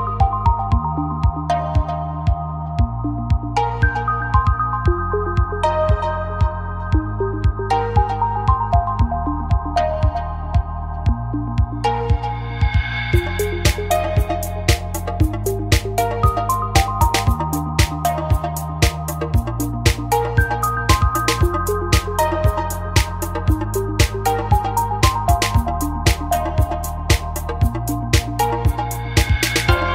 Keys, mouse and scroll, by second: 4.8 KP_7, 7.5 middle click, 7.9 right click, 8.4 x, 9.9 x, 10.7 middle click, 10.8 middle click, 11.2 ctrl+r, 12.5-13.8 drag, 12.5 right click, 13.3 f, 13.8 a, 14.2 right click, 14.7 click, 14.7 z, 16.0 Down, 16.8 g, 19.5 a, 19.8-21.3 drag, 21.6 middle click, 23.5 middle click, 25.4-26.4 middle drag, 27.2 middle click, 28.4-29.5 right drag, 29.0 x.